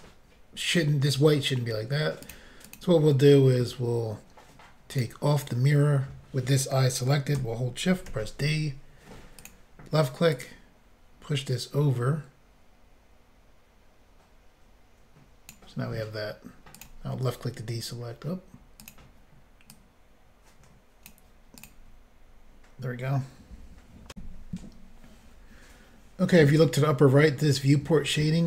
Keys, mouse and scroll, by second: 2.3 click, 2.3 click, 2.7 click, 2.8 double click, 5.0 click, 5.0 click, 8.1 d, 10.4 click, 16.8 click, 16.8 click, 18.8 click, 18.9 click, 19.8 click, 21.6 click, 21.7 click, 24.1 Insert.